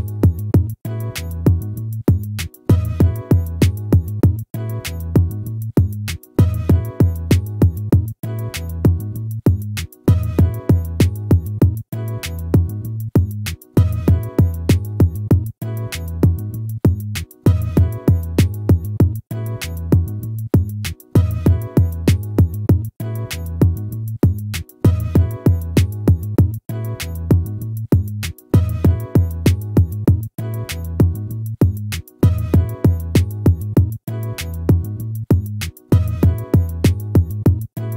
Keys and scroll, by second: 12.4 ctrl+-, 15.4 ctrl++, 25.9 ctrl+-, 32.5 ctrl++.